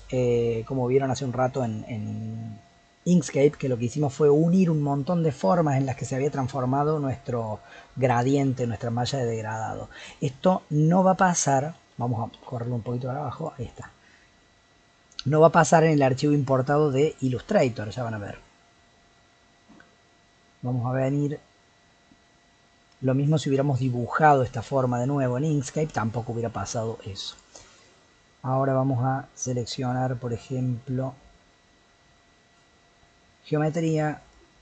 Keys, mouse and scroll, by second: 9.9 scroll down 1, 10.2-11.9 middle drag, 11.9 g, 13.7 click, 14.0-18.7 middle drag, 22.4-24.2 scroll down 3, 24.2 click, 27.3 click, 29.6-30.8 scroll down 3, 34.2 click.